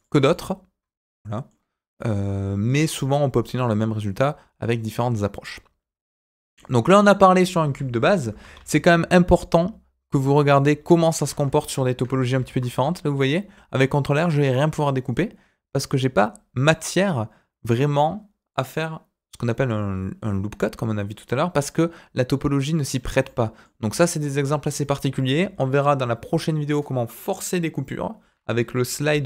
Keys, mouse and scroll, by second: 0.0 Tab, 0.3-1.4 middle drag, 1.9 middle click, 6.3 middle click, 8.2 Delete, 8.5 shift+a, 10.9 middle click, 11.1 Tab, 11.5 shift+middle click, 12.3 ctrl+r, 23.2 middle click, 23.8 Escape, 24.3 Tab, 25.8 Delete, 28.7 KP_1, 29.0 shift+a.